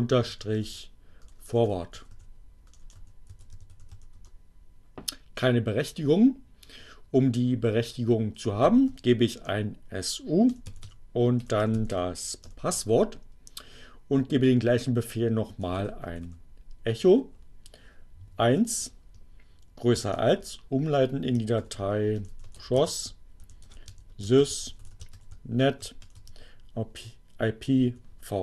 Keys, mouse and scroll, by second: 0.0-4.2 typing, 4.2 Return, 6.9-7.8 typing, 9.4 Return, 9.5-10.4 typing, 12.0 u, 12.7 Return, 14.5-17.5 typing, 18.9 shift+space, 19.9 shift+,, 20.0 shift+space, 20.8 shift+7, 22.0-27.5 typing.